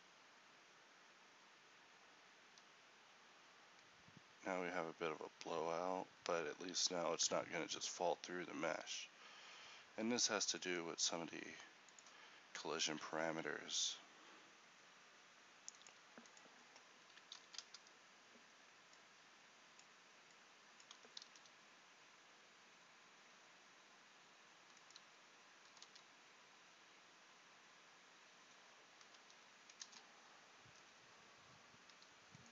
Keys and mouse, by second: 8.2 Escape, 21.3 alt+a, 26.3 r.